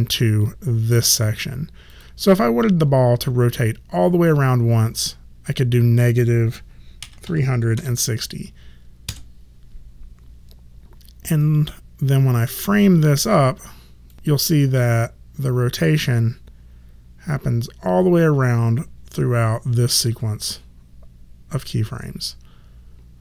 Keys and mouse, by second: 0.4 click, 4.2 click, 7.0 KP_3, 7.2 KP_6, 7.7 KP_0, 9.0 KP_Enter, 12.5 click.